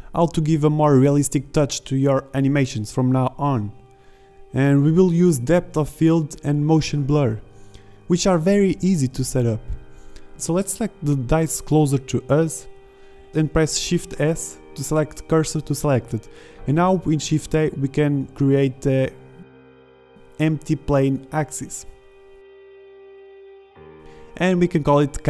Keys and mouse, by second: 0.9 shift+z, 8.9 z, 9.5 alt+a, 12.1 shift+s, 18.9 shift+a, 22.8 middle click, 22.9-24.7 drag, 24.9-25.2 drag.